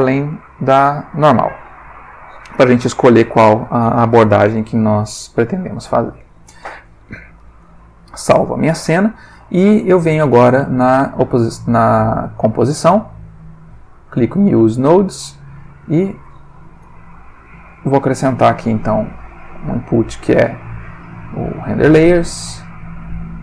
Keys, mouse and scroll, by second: 1.1 click, 5.6 ctrl+s, 12.3 click, 14.4 click, 15.8 middle click, 16.8 Home, 18.6 shift+a, 21.5 click, 22.4 shift+click, 22.9 shift+a.